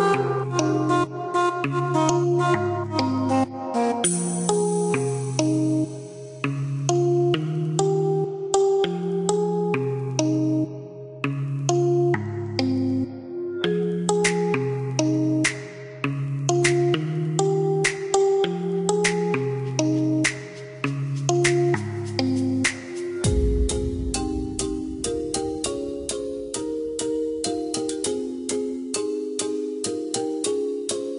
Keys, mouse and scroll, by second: 3.2 click, 3.7 click, 4.5 KP_7, 4.9 KP_Decimal, 5.2 KP_8, 5.5 KP_Enter, 7.0 click, 10.3 click, 12.2 click, 14.1 click, 14.9 KP_3, 15.1 KP_8, 15.5 KP_Enter, 19.8 click, 21.5 Escape, 23.0 click, 24.7 click, 29.5 click.